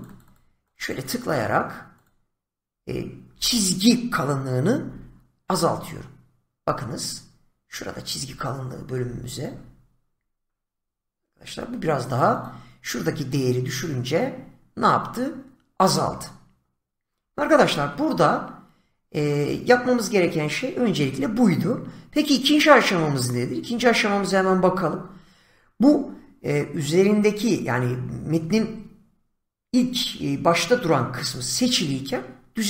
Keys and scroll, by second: 4.8 <, 12.3 <.